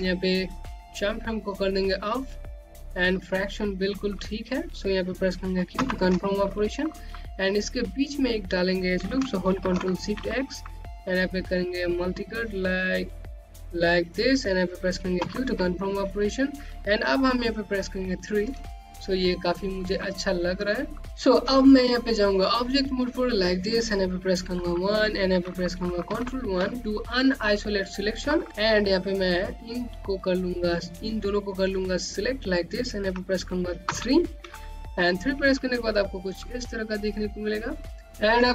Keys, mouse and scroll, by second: 1.9 click, 3.7 click, 6.3 q, 7.0 middle click, 10.2 x, 12.4 middle click, 12.6 Home, 12.8 middle click, 15.7 q, 18.3 3, 19.1 scroll down 1, 19.5 click, 20.6-21.0 scroll down 1, 22.7 right click, 25.1 1, 26.6 1, 29.3-30.2 scroll down 1, 30.2 click, 34.4 3, 35.4 click, 35.8 scroll down 1, 36.1 click, 37.1-38.0 scroll up 1, 38.0 scroll down 1, 38.3 click.